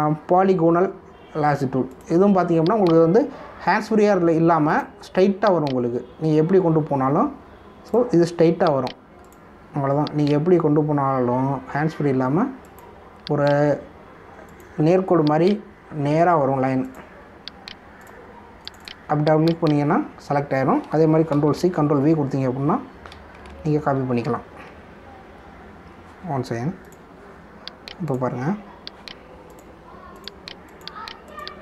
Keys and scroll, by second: 22.3 ctrl+c, 22.6 ctrl+v, 24.4 ctrl+alt+z, 25.8 ctrl+d.